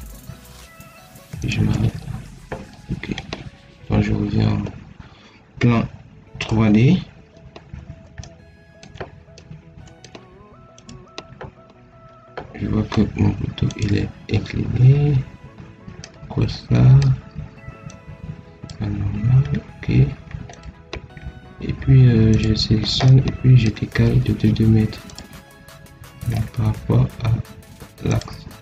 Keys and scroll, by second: 2.5 Escape, 5.1 Escape.